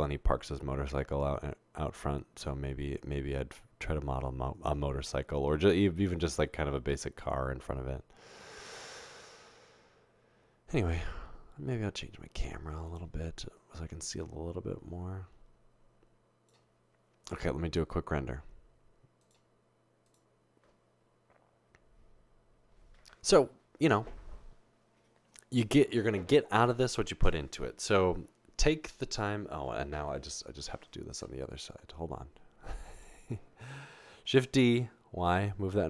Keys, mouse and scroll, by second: 10.8-11.4 scroll down 2, 10.8 middle click, 14.1-16.5 drag, 34.3-35.2 typing.